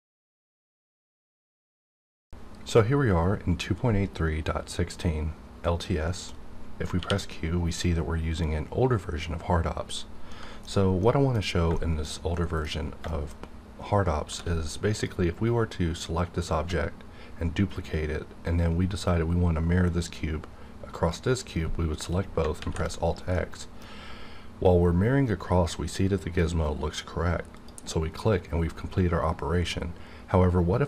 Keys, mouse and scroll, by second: 6.9 q, 10.3 middle click, 10.4 scroll down 1, 11.0 middle click, 11.4 scroll down 1, 12.0 shift+scroll down 1, 12.7 scroll down 1, 13.1 shift+middle click, 14.2 shift+middle click, 14.3 shift+d, 14.9 click, 22.6 alt+x, 23.3-26.5 middle drag, 27.6 click.